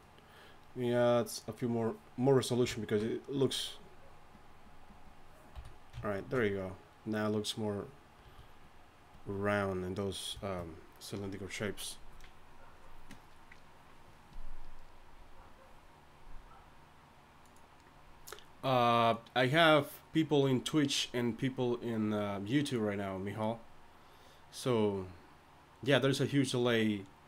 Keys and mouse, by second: 5.6 a, 8.2 a.